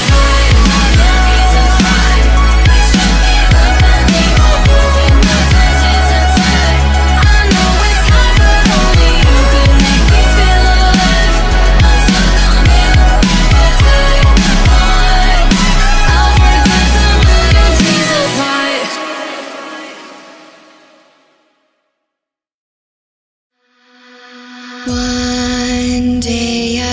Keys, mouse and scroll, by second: 0.9 click, 1.2-2.2 middle drag, 2.2 scroll down 1, 2.5 scroll up 5, 2.8-4.6 middle drag, 5.4-9.3 drag, 9.5-11.4 middle drag, 11.5 scroll up 2, 11.7 scroll down 1, 12.0-14.1 middle drag, 14.1 click, 14.4-16.2 shift+middle drag, 16.2-18.8 drag, 18.8 n, 19.0 middle click, 19.4-19.9 scroll up 5, 19.9 middle click, 20.8 z, 22.7-23.9 middle drag, 23.9 click, 24.4 shift+a.